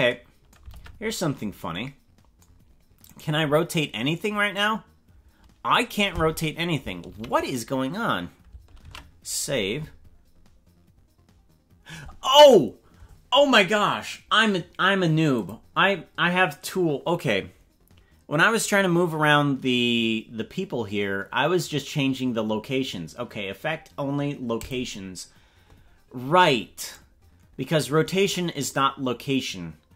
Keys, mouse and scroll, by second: 0.8 ctrl+Tab, 1.1-1.4 scroll down 6, 3.1 right click, 4.5-5.9 drag, 7.2 ctrl+z, 8.9 ctrl+s, 15.3 click, 24.6 click, 26.8 right click.